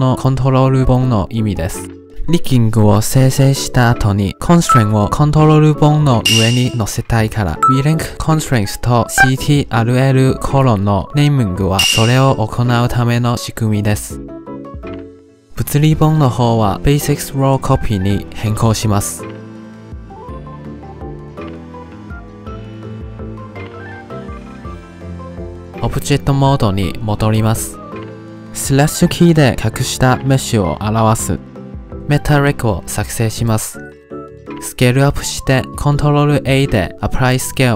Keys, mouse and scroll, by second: 15.7 drag, 15.9 click, 16.9 click, 17.2 click, 18.1-18.8 scroll down 11, 19.1-20.5 drag, 20.8 click, 21.6 click, 22.5 click, 23.4 click, 24.1 click, 24.9 click, 27.1 click, 27.5 ctrl+Tab, 27.9 click, 28.8 click, 30.1 /, 31.2-31.7 scroll down 4, 31.7 middle click, 32.0 shift+a, 33.7-34.2 middle drag, 34.2 s, 36.0 shift+middle click.